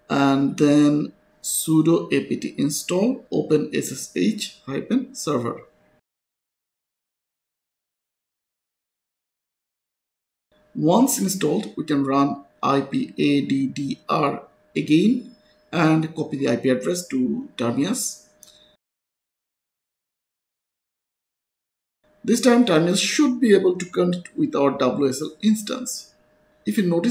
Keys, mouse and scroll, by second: 1.7 click, 3.2 ctrl+c, 3.7 click, 5.0 right click, 5.4 Return, 5.8 y, 6.1 Return, 12.4 click, 13.3 ctrl+c, 13.5 click, 13.9 right click, 14.7 Return, 16.5 click, 17.6 right click, 18.5 click, 21.0 click, 23.8 click.